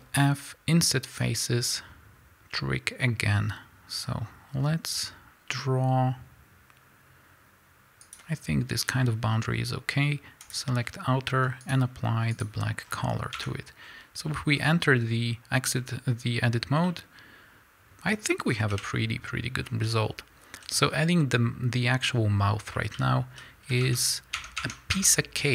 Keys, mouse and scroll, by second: 1.2 ctrl+f, 10.4 click, 11.6 click, 12.4 click, 12.8 scroll down 1, 13.3 Tab, 13.8 scroll down 1, 14.5 scroll up 1, 15.7 scroll down 1, 16.8-25.5 middle drag, 18.7 KP_1, 19.6-20.6 scroll up 2, 20.6 z, 20.9-22.6 scroll up 2, 22.6-23.3 scroll down 2, 23.3 z.